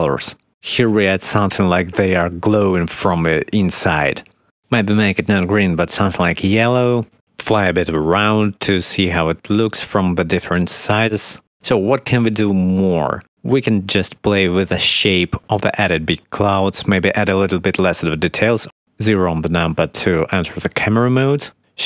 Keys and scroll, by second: 18.9 0, 20.9 shift+`.